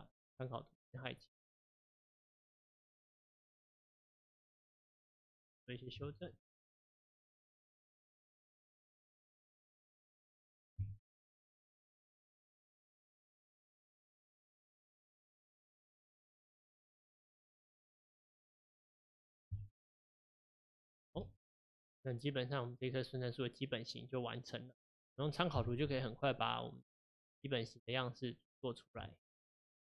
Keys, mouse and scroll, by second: 0.8 click, 1.2-1.7 scroll down 1, 1.7-2.2 scroll up 3, 3.3 click, 4.5 g, 5.4 click, 6.0 Tab, 11.6 click, 14.1 Tab, 15.6 click, 16.6 g, 18.4 middle click, 18.7 Tab, 19.5 KP_1, 20.4 middle click, 21.2 alt+z, 21.6-22.5 middle drag, 22.5-22.9 scroll down 1, 22.9-25.5 middle drag, 25.5 KP_1, 27.2-28.0 scroll down 2, 28.0 scroll up 3, 29.1 shift+middle click.